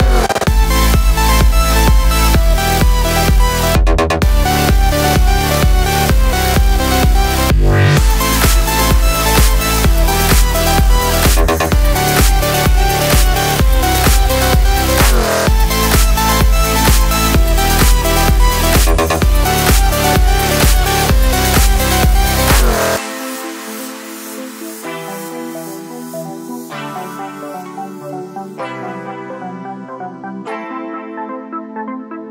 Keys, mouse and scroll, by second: 0.5 click, 0.6 middle click, 1.3 click, 1.5 alt+d, 2.4 click, 2.5 x, 3.0 click, 3.2 click, 3.4-6.3 middle drag, 4.2 shift+Tab, 5.5 KP_Enter, 5.8 g, 6.3 click, 6.4 Tab, 7.0 shift+Tab, 7.4 g, 7.9 click, 8.1 click, 8.3 click, 8.5 g, 9.0 click, 9.1 click, 9.3 click, 9.5 click, 9.9 g, 10.2 middle click, 10.7 click, 11.0 alt+d, 11.4 click, 11.4 middle click, 11.8 g, 12.1 click, 12.2 alt+d, 13.3 click, 13.4-15.3 middle drag, 13.7 scroll down 2, 15.3 shift+right click, 15.5 middle click, 16.1 shift+right click, 16.2-18.6 middle drag, 16.7 shift+a, 17.5 Tab, 18.1 s, 18.6 click, 18.7 s, 19.6 click, 19.7 middle click, 20.2 s, 21.0 click, 23.9-26.0 middle drag, 23.9 z, 26.0 click, 26.4 Tab, 26.4 middle click, 27.0 g, 27.5 click, 28.6 r, 29.4 KP_Enter, 32.1 click.